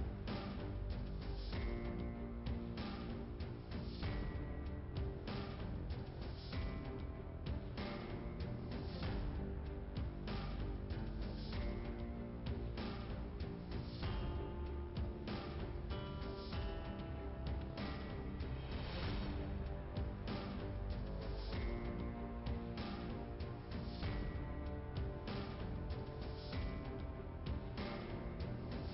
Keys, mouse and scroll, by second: 1.7 click, 4.1 click, 4.2 click, 5.4 click, 6.2 click, 6.4 click, 9.2 click, 10.8 click, 11.9 click, 13.1 click, 13.8 middle click, 15.2 click, 17.2 click, 18.5 click, 20.7-21.1 scroll up 1, 21.1 click, 23.1 click, 23.6 scroll down 1, 26.6 click, 27.4 click, 28.7 scroll up 2.